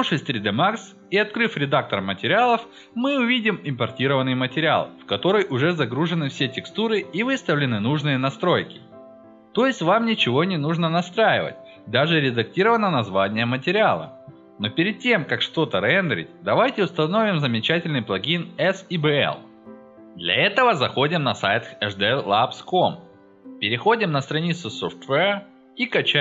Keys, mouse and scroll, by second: 0.0 click, 1.5 click, 2.0 click, 5.3 click, 8.1 click, 10.9 click, 12.4 drag, 16.6 click, 18.0 click, 19.2 click, 25.6 click.